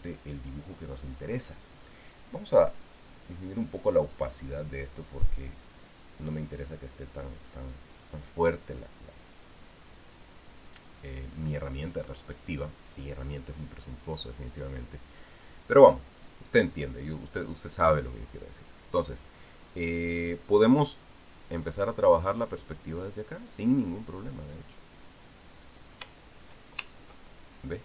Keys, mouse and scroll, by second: 3.6 click, 4.9-8.9 drag, 15.3 click, 26.4 click.